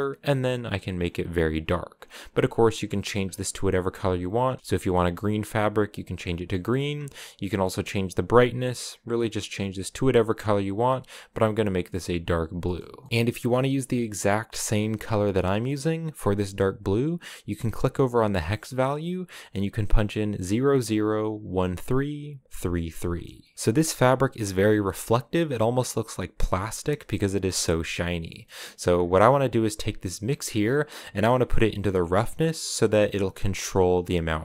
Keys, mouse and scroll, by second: 2.1 click, 3.1-4.1 scroll down 4, 4.1 click, 4.6-5.8 shift+middle drag, 5.8 click, 13.1 ctrl+v, 23.0 middle click, 23.4 scroll down 1, 24.4 shift+middle click, 24.6 shift+scroll up 2, 25.3-25.9 scroll up 1, 26.9 scroll down 1, 27.1-28.6 shift+middle drag, 28.6-29.0 scroll up 1, 29.0-33.7 drag.